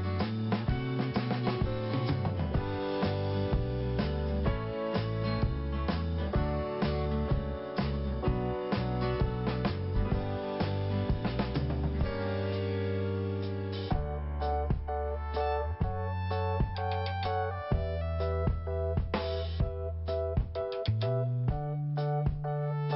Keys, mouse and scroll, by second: 0.4 click, 9.5 click, 9.6 click, 10.4 click, 10.5 click, 15.1 scroll down 1, 15.5 scroll up 1, 15.8 click, 15.9 click, 16.4 scroll down 1, 17.4 click, 17.5 click, 18.3 click, 18.4 click, 19.0 click, 19.6 click, 19.6 click, 19.7 click, 20.5 click, 20.5 click, 20.6 click, 22.2 click.